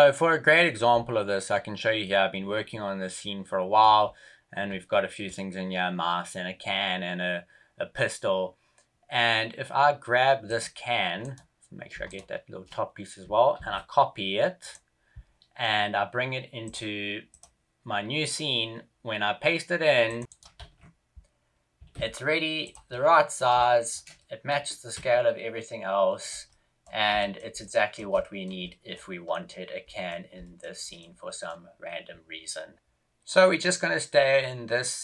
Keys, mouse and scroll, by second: 20.0 click, 20.4 right click, 20.6 ctrl+v, 21.7 g, 22.8 middle click, 23.5 shift+middle click, 24.1 middle click, 24.5 g, 26.4 middle click, 27.1 shift+middle click, 27.5 middle click, 28.1 shift+middle click, 28.6 middle click, 30.1 middle click, 30.3 shift+middle click, 30.7 middle click, 31.2 middle click.